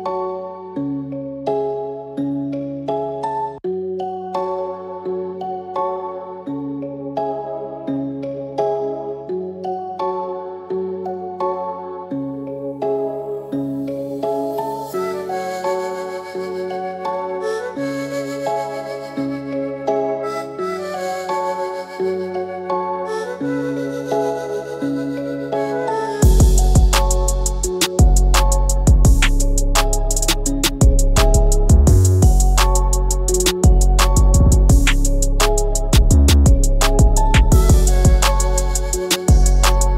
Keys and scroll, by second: 38.5 ctrl+alt+`.